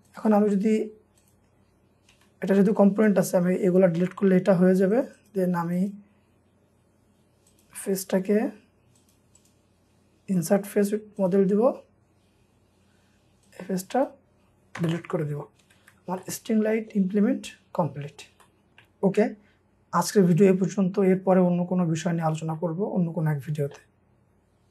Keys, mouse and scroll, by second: 0.3 double click, 0.6 scroll up 1, 2.1 Delete, 3.9 Delete, 4.4 scroll up 1, 5.2 double click, 6.2-6.6 scroll up 1, 7.9 right click, 11.6-11.9 scroll down 1, 14.7 Delete, 15.6 Escape, 15.8 Escape, 16.2 middle click, 17.1 scroll down 1, 18.4 middle click, 18.7 scroll down 1, 18.8 middle click.